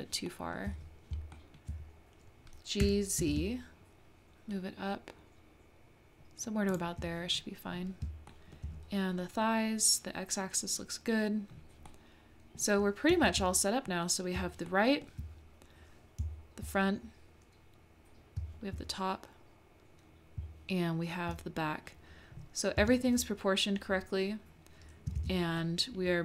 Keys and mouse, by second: 0.3-0.7 shift+middle drag, 1.4 shift+middle click, 2.8 g, 8.4 shift+middle click, 11.9 middle click, 14.7 shift+middle click, 18.4 `, 20.4 `, 22.8 Tab, 25.2 alt+z, 25.6-26.1 drag, 26.1-26.2 middle drag.